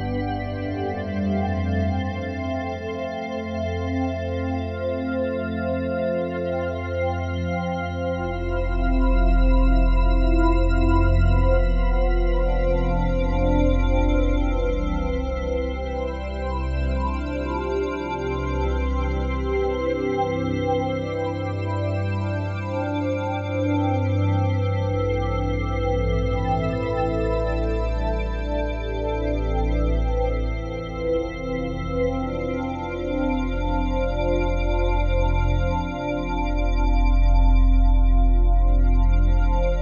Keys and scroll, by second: 2.1 ctrl+z.